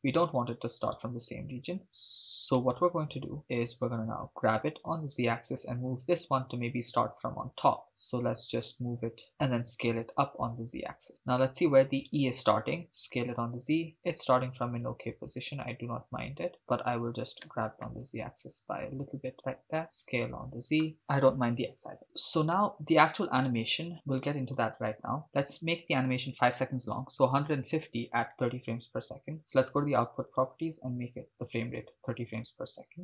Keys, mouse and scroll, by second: 0.8-1.8 right drag, 1.8 s, 2.6 z, 3.4 click, 4.3 g, 4.9 z, 9.3 shift+click, 9.9 s, 9.9 z, 11.1 click, 12.1-12.8 drag, 12.1 right click, 12.9 s, 13.1 z, 16.5 click, 17.5 g, 17.8 z, 19.3 shift+click, 19.8 s, 19.9 z, 20.9 right click, 23.9 click, 25.2-27.8 drag, 29.4 click, 30.3-31.6 drag.